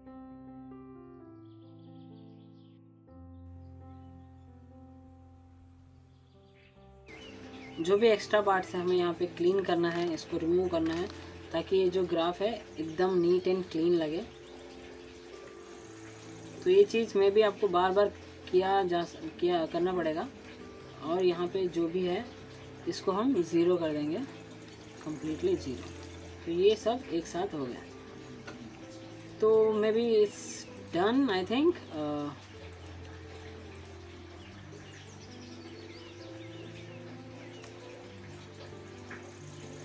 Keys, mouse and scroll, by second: 0.3 ctrl+z, 0.6 drag, 2.9 alt+scroll up 2, 2.9 alt+middle click, 3.1 click, 3.5 scroll down 1, 3.9 click, 4.2 alt+middle click, 4.3 alt+scroll up 1, 4.4 alt+middle click, 4.5 alt+scroll down 1, 4.6 alt+middle click, 4.7 alt+click, 5.1 f, 5.3 scroll down 1, 5.4 click, 5.5 scroll up 1, 5.7 alt+click, 6.2-6.7 alt+scroll down 2, 6.5 f, 6.8 click, 8.6-9.2 scroll down 1, 11.6-12.2 click, 15.0-15.8 scroll down 1, 15.8 click, 16.5-16.8 alt+scroll up 1, 16.8 alt+middle click, 18.0 alt+scroll up 1, 18.8 alt+middle click, 19.8 alt+scroll down 1, 20.2 alt+middle click, 20.7 alt+scroll up 1, 20.9 click, 21.2-21.8 alt+scroll up 1, 22.5 alt+click, 22.8 alt+scroll up 1, 23.0 alt+middle click, 23.4-23.8 alt+scroll down 1, 24.0-25.2 drag, 27.4 0, 27.8 Return, 28.4 click, 28.7 scroll up 1, 29.1 alt+middle click, 29.9 alt+scroll up 1, 30.7 alt+scroll down 1, 30.7 alt+middle click, 31.7 click, 33.7-34.2 scroll down 2, 34.2 alt+middle click, 34.6-35.2 alt+scroll down 1, 35.2 alt+click.